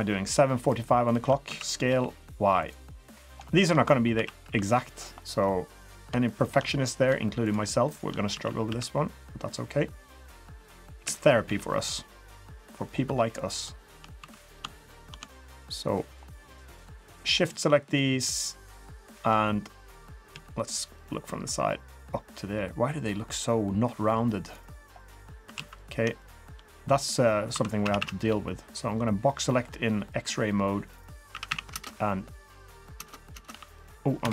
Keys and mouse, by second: 1.0 shift+click, 1.5 s, 2.9 middle click, 3.5 shift+middle click, 4.1 s, 5.2 middle drag, 5.8 click, 6.4 shift+click, 6.7 middle drag, 8.3 s, 11.0 KP_1, 11.4 KP_3, 12.6 drag, 13.1 3, 14.2 2, 14.4 click, 14.8 shift+click, 15.3 shift+middle click, 15.9 shift+middle click, 16.7 shift+click, 17.0 shift+click, 17.4 shift+middle click, 17.9 shift+middle click, 18.6 shift+click, 20.3 KP_3, 21.4-24.5 drag, 25.5 alt+z, 26.2 shift+drag, 27.5 1, 27.8 a, 28.0 a, 28.3 b, 30.1 click, 31.3 a, 31.5 a, 31.7 space, 33.0 space, 33.3 space, 33.5 b.